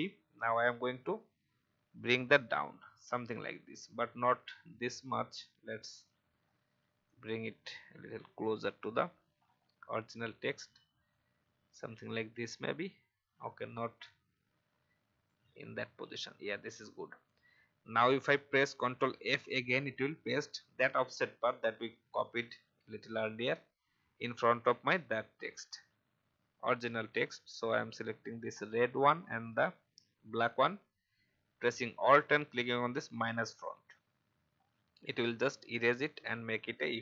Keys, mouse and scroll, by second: 0.8 Right, 1.6 Down, 4.4-4.7 alt+scroll up 1, 6.1 scroll down 1, 7.0-8.6 drag, 10.5 alt+scroll up 1, 11.1 click, 12.7 alt+scroll down 1, 13.4 alt+scroll up 1, 14.0-15.7 drag, 16.0 alt+scroll down 1, 25.3-25.6 alt+scroll up 1, 28.9 shift+click, 33.5 alt+click, 34.6 alt+scroll down 1, 35.3 alt+scroll down 1.